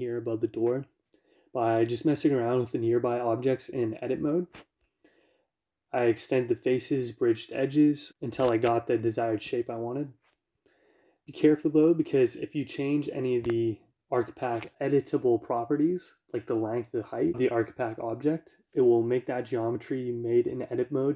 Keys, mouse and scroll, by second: 0.1 click, 5.7-13.4 middle drag, 5.7 y, 13.6 z.